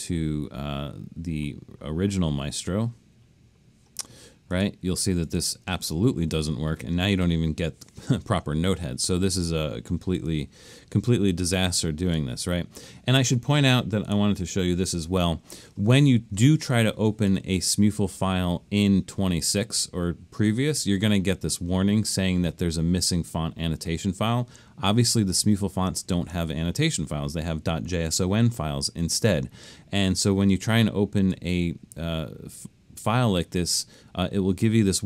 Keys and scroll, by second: 12.0 super+z.